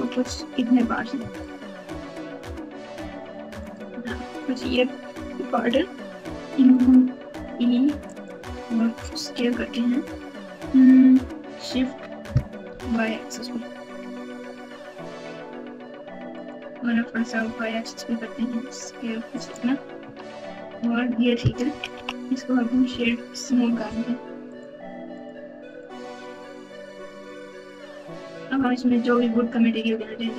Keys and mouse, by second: 1.2 3, 1.4-3.6 drag, 7.2 e, 9.1 s, 16.9 s, 20.0 Tab, 20.7 alt+z, 21.6-22.9 typing, 24.4 right click, 25.6 right click, 27.2 right click, 28.8 z.